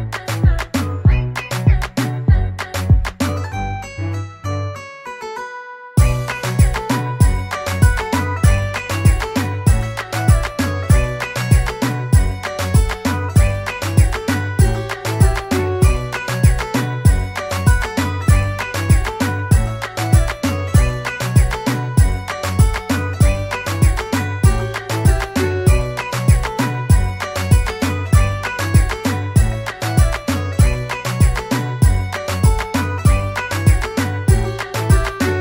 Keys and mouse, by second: 3.0 click, 9.1 BackSpace, 10.0 c, 12.9 click, 13.8 click, 23.2 ctrl+d, 25.9 click.